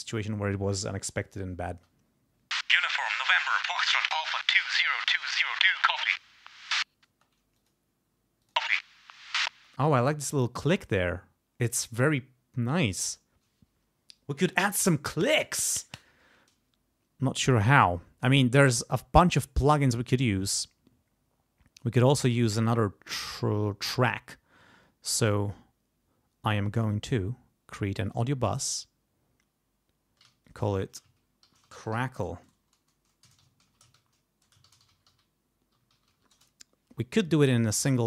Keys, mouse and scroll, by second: 1.7 space, 7.1 space, 7.5 click, 8.4 click, 8.5 space, 9.5 space, 11.9 click, 13.1 click, 17.7 click, 21.8 click, 25.1 right click, 28.0 click, 30.4 click, 31.2-32.4 typing, 33.2 Caps_Lock, 33.6 ctrl+a, 33.9 ctrl+shift+c, 34.4 ctrl+shift+BackSpace, 34.6 ctrl+shift+c, 34.8 ctrl+shift+r, 35.1 ctrl+shift+c, 35.5-36.6 typing, 37.6 click.